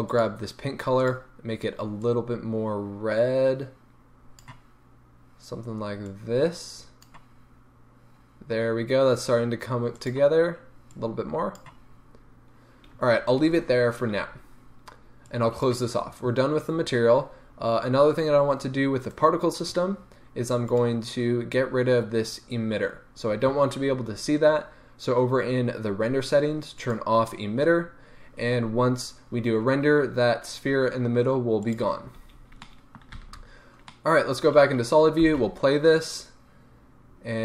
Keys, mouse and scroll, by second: 0.0-0.5 drag, 1.0 click, 9.9 click, 15.2-19.2 drag, 17.3-19.2 scroll down 1, 19.2 right click, 20.9 click, 23.8-24.7 scroll down 1, 27.0 click, 31.6 click, 32.2-32.6 scroll down 1, 32.6-33.1 middle drag, 33.1 z, 33.4-33.8 middle drag, 35.2 space.